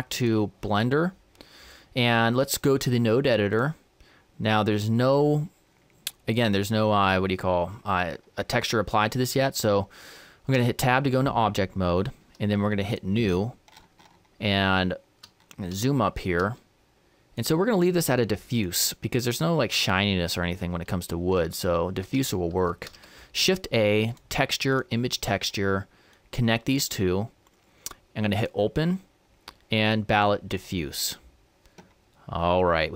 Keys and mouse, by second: 10.2 Tab, 12.7-19.0 drag, 30.4-32.2 drag, 31.8 middle click, 32.2-32.9 middle drag.